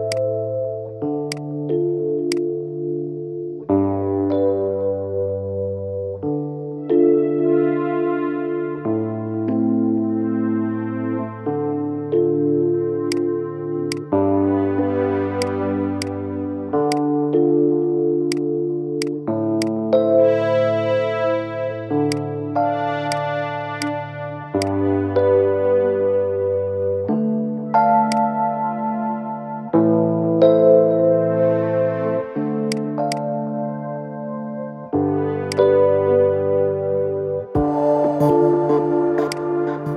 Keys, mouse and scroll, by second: 4.3 scroll up 1, 8.6 scroll down 1, 15.2-15.8 drag, 19.3 click, 19.7-20.1 scroll up 2, 21.9 click, 23.6 click, 27.8 click, 28.3 scroll up 2, 28.8-29.9 shift+middle drag, 29.9 Tab, 32.4 click, 32.9 shift+click, 34.3 e.